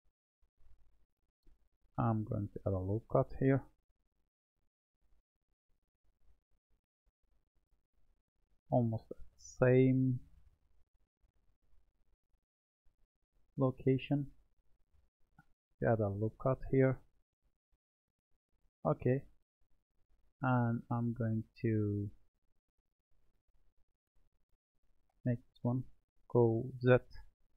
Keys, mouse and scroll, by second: 1.1 Tab, 4.8 click, 7.2-11.5 drag, 11.9-14.9 middle drag, 15.7-18.8 drag, 19.5-21.8 middle drag, 21.8 click, 24.7 click, 26.2 g.